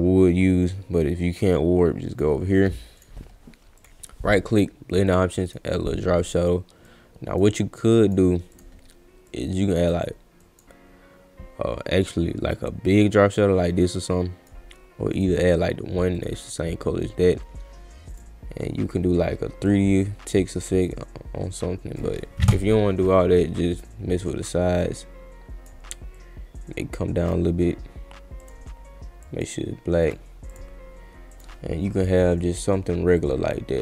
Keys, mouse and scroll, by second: 3.0 right click, 3.8 click, 5.1 click, 5.4 click, 6.2 drag, 6.9 click, 7.8 click, 8.5 click, 9.3 click, 10.4 drag, 12.5 click, 15.1 click, 16.1 click, 18.1 click, 19.6 click, 23.6 click, 26.1 click, 28.4 click, 29.2 click, 30.0 click, 30.5 click, 31.3 click, 32.0 click.